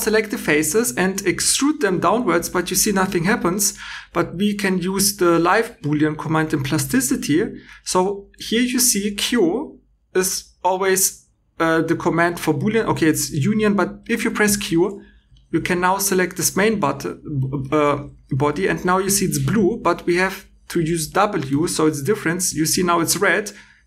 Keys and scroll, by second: 14.4 q, 21.4 w.